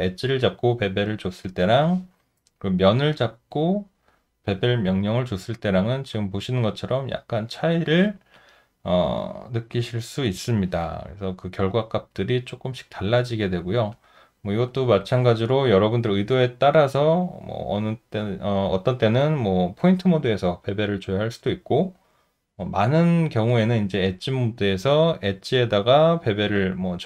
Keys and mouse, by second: 5.3 alt+middle click, 6.1 alt+click, 6.7 alt+middle click, 7.4 alt+right click, 8.4 alt+click, 11.1 alt+middle click, 12.5 alt+right click, 13.2 alt+middle click, 13.9 alt+click.